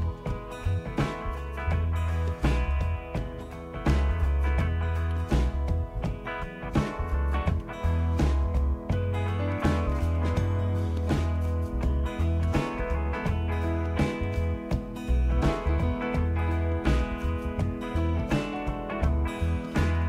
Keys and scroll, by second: 0.0-0.6 typing, 7.1 Up, 8.1 Left, 8.2-9.2 Left, 9.5 Left, 9.7-10.9 typing, 11.2 Delete, 12.4 Return, 19.8 c.